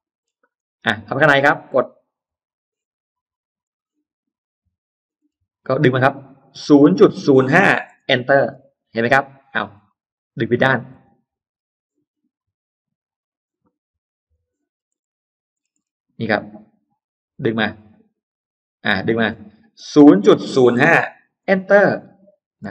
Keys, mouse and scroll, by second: 0.3 scroll up 1, 0.9 click, 1.5 middle click, 2.1 click, 3.5 click, 5.1 middle click, 6.6-8.3 typing, 7.9 Return, 8.7 Escape, 9.3 Escape, 9.6-9.9 scroll down 1, 9.9 ctrl+z, 10.3 middle click, 10.5-10.9 scroll down 1, 11.3 scroll up 1, 12.2-12.5 scroll up 1, 12.9 click, 14.1 click, 14.5-14.9 scroll down 2, 15.4 scroll down 2, 17.6 middle click, 19.7-21.2 typing, 21.2 Return, 22.5 space.